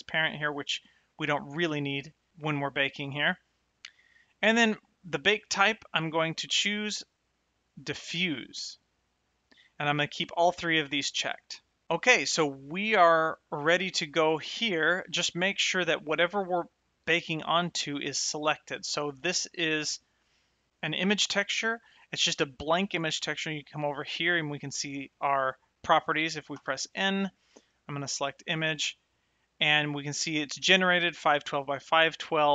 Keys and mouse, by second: 5.8 click, 7.9 click, 17.9 click, 21.1 click, 26.9 n, 28.0 click.